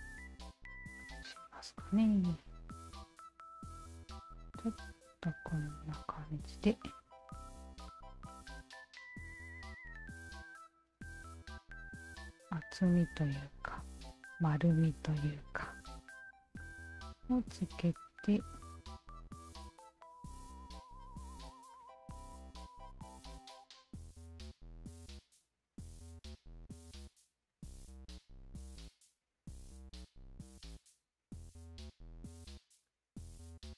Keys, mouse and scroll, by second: 1.0 alt+click, 2.3 shift+click, 3.0 click, 4.8-6.3 shift+drag, 6.7-9.4 shift+drag, 10.3 alt+click, 11.3 shift+click, 13.3 shift+click, 15.3 click, 15.7 shift+click, 16.6-19.7 shift+drag, 20.6 shift+click, 21.1 shift+click, 21.7 alt+shift+click, 23.3-24.9 shift+drag, 25.2-26.3 alt+shift+drag, 26.6 ctrl+z, 27.5 shift+click, 27.9 alt+shift+click, 29.2-30.6 shift+drag, 30.8-32.3 alt+shift+drag, 32.9 alt+click, 33.5 alt+click.